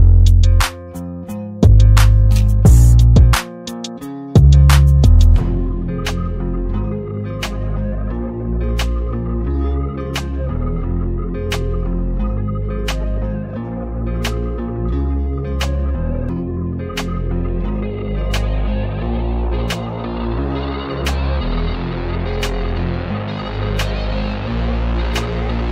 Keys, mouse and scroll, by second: 1.2 click, 2.4 click, 6.5 ctrl+-, 7.9 space, 8.2 click, 8.2 click, 8.4-9.4 space, 10.0-10.7 drag, 23.6 click.